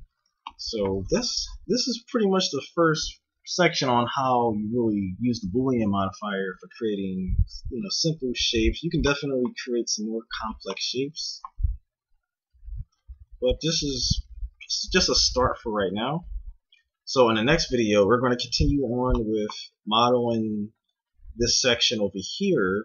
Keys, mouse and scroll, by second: 1.5 a, 4.7-6.8 middle drag, 10.8-12.4 middle drag, 12.6 a.